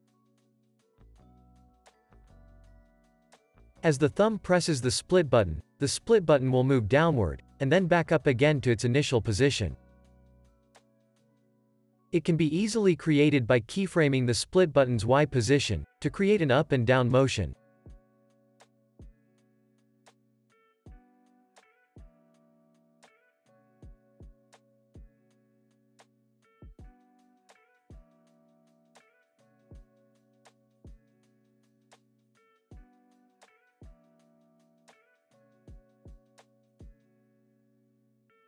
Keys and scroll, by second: 7.2 p, 15.6 alt+x, 21.5 alt+x, 28.5 F9, 33.8 super+s, 34.4 space, 35.5 space, 35.8 super+s, 38.3 super+a.